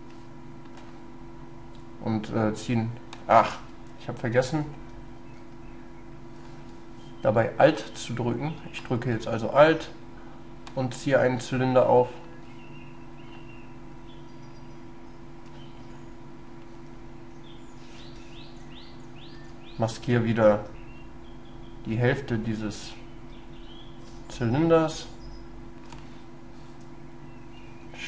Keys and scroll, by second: 3.6 ctrl+z, 4.8 ctrl+y, 18.1 ctrl+z, 19.4 ctrl+y, 23.4 ctrl+space.